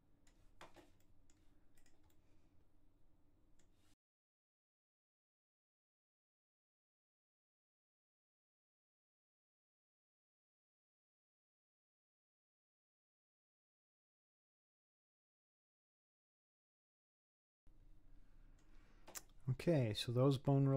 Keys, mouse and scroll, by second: 1.0 middle click, 1.8 click, 2.2-4.0 middle drag, 4.1 click, 4.4 ctrl+z, 4.6 click, 5.0 middle click, 5.3 middle click, 5.7 click, 6.0 scroll down 4, 6.1 middle click, 6.3 middle click, 6.5 click, 6.7 middle click, 7.0 click, 7.2 scroll up 1, 7.2 scroll down 1, 7.5 h, 7.6 middle click, 7.8 click, 7.9 h, 8.0 scroll up 1, 8.1 middle click, 8.4 click, 8.7 click, 9.0 middle click, 9.4 click, 9.4 middle click, 9.7 click, 10.0 click, 10.2 scroll down 1, 10.2 middle click, 10.5 click, 10.6 middle click, 11.1 click, 11.5 click, 11.8 click, 12.2 click, 12.5 middle click, 12.8-14.3 drag, 14.3 middle click, 14.8 scroll up 4, 14.8 click, 15.1 click, 15.3 middle click, 15.8 click, 16.1 click, 16.5 click, 16.8 middle click, 17.2 click, 17.5-19.3 middle drag, 19.3-20.0 scroll down 4, 20.0-20.7 middle drag.